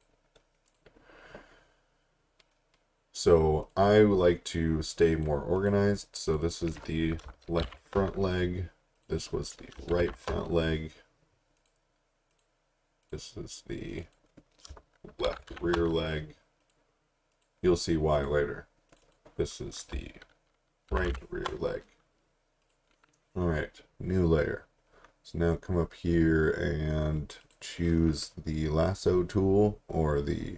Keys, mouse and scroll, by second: 3.6 click, 7.2-8.1 typing, 9.0 click, 9.7-10.6 typing, 11.6 click, 15.0-16.0 typing, 16.6 click, 20.9 shift+r, 21.1 shift+r, 22.6 click, 27.4 click.